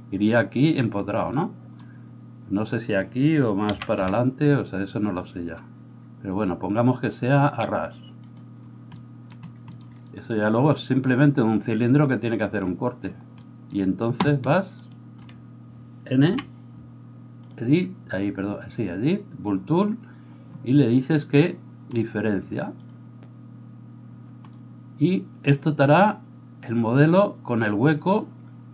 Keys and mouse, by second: 3.7 g, 15.3-22.8 middle drag, 16.2 n, 22.8-28.7 drag.